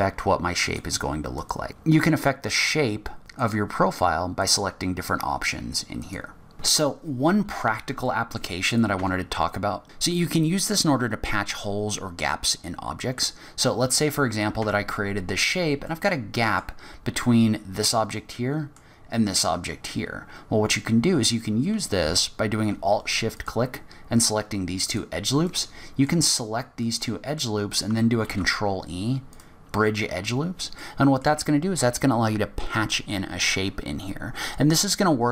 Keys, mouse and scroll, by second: 1.5 click, 3.5 click, 4.7 click, 6.2 click, 6.5-8.0 scroll down 6, 8.0 scroll down 5, 8.0 middle click, 8.6 click, 9.0 Tab, 9.4-9.8 scroll up 3, 12.6 scroll up 1, 13.3 scroll down 1, 14.3 click, 14.6 Tab, 15.3 scroll up 1, 15.9 middle click, 18.3 middle click, 23.3 alt+shift+click, 24.9 alt+shift+click, 25.4 middle click, 26.2-26.8 scroll up 3, 26.8 middle click, 28.2 ctrl+e, 30.3 scroll down 4, 30.8 middle click.